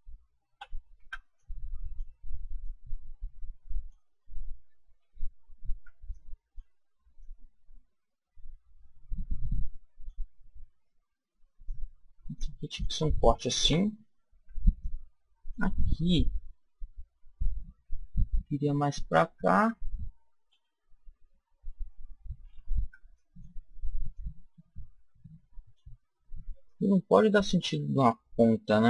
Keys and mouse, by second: 0.4 a, 0.9 b, 2.5 click, 4.9 a, 5.6 b, 7.1 click, 11.5 click, 13.6 a, 14.2 b, 16.0 click, 20.4 a, 22.7 b, 24.0-25.8 drag, 26.6 click.